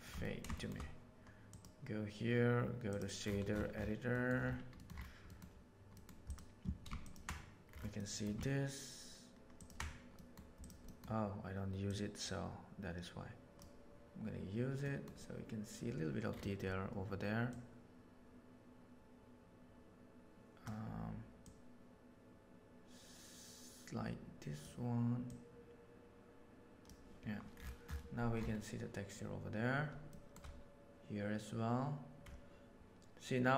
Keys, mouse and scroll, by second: 0.1 ctrl+middle click, 0.5 shift+middle click, 1.5-2.0 drag, 4.0 middle click, 4.7 middle click, 5.2 middle click, 5.8 middle click, 6.2 click, 7.9 middle click, 9.5 ctrl+shift+click, 10.1 middle click, 10.5 click, 11.8-12.4 drag, 14.8 middle click, 17.4 drag, 19.0-20.6 drag, 21.4 drag, 23.1 click, 25.2 click, 30.0-30.3 shift+middle drag.